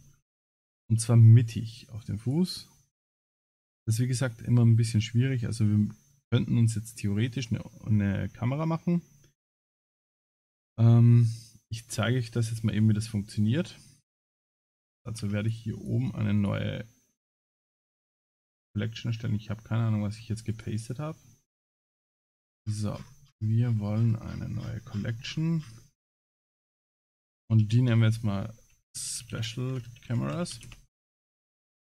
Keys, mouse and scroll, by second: 0.6 shift+middle click, 1.1 middle click, 2.2 click, 3.7 middle click, 5.1 shift+middle click, 5.8 shift+middle click, 7.8 scroll down 4, 8.2 scroll up 6, 8.9 scroll down 2, 9.7 click, 10.1 middle click, 13.4 scroll up 3, 14.6 right click, 14.6-14.9 scroll up 2, 15.4 click, 15.8 click, 16.0 right click, 19.4 ctrl+z, 19.4 right click, 20.5 click, 20.8 right click, 22.6-25.7 scroll down 159, 26.6 click, 26.6 scroll down 1, 26.8 click.